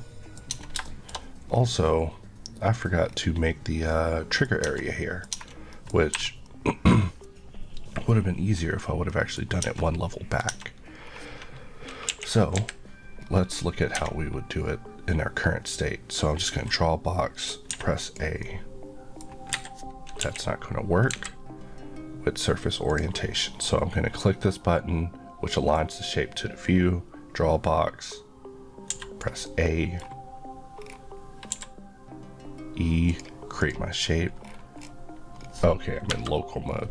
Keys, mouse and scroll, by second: 0.5 scroll up 1, 0.9 shift+middle click, 1.1 scroll up 1, 3.0 scroll down 1, 3.9 middle click, 4.7 Tab, 4.8 middle click, 5.3 Tab, 5.7 middle click, 6.1 3, 6.5 middle click, 8.6 scroll down 1, 9.3 scroll down 1, 9.6 Tab, 10.1 middle click, 10.5 Tab, 11.1-11.6 scroll down 1, 12.8 KP_1, 13.2 scroll up 1, 13.8 scroll up 1, 14.0 Tab, 15.7 click, 17.8 a, 18.4 middle click, 19.5 Escape, 20.2 KP_1, 21.1 KP_3, 22.9 click, 25.8 click, 29.0 a, 29.5 middle click, 30.8 scroll down 1, 31.5 e, 33.1 click, 34.5 scroll, 34.5-34.8 scroll down 1, 35.4 scroll up 1, 36.1 KP_Divide.